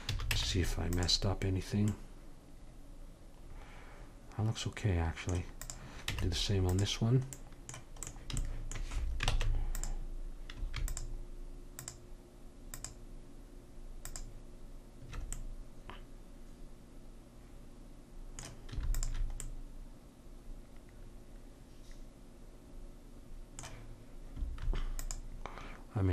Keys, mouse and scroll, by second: 0.1 a, 0.3 Tab, 5.6 click, 6.1 Tab, 9.3 ctrl+Tab, 10.9-15.9 drag, 15.4 middle click, 18.9-20.7 drag, 20.7 middle click, 25.0-26.1 drag.